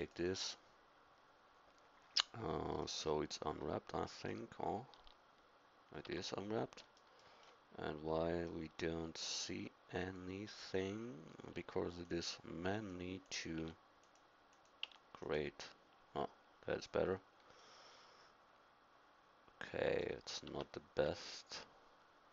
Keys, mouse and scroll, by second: 0.0-2.4 drag, 2.4 middle click, 2.8 click, 3.7-5.0 middle drag, 5.0 Tab, 6.1 Tab, 13.0-16.9 drag, 17.8 middle click, 19.0 middle click, 20.5 Tab, 21.1 Tab.